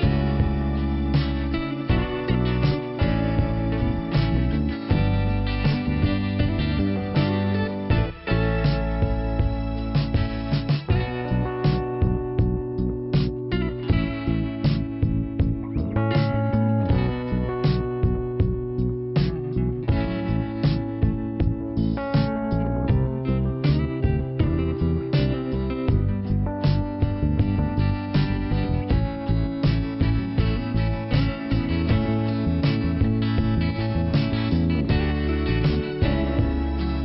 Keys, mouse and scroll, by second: 0.9 click, 1.0 click, 2.2 right click, 2.4 right click, 3.9 click, 4.0 click, 4.8 click, 4.9 click, 5.7 click, 5.8 click, 7.0 click, 7.1 click, 7.2 right click, 7.4 right click, 8.1 click, 8.3 click, 9.8 click, 10.4 click, 10.4 click, 11.4 right click, 11.5 right click, 11.9 click, 12.0 double click, 13.3 click, 14.4 click, 15.0 right click, 16.4 click, 17.0 click, 18.3 click, 18.8 click, 19.7 click, 20.5 click, 22.5 click, 25.4 click, 25.7 click, 26.5 click, 26.5 click, 28.3 scroll up 2, 28.6 click, 28.9 click, 31.7 scroll down 2, 34.0 right click, 34.8 click, 36.4 click, 36.5 click, 36.7 right click, 36.8 double right click.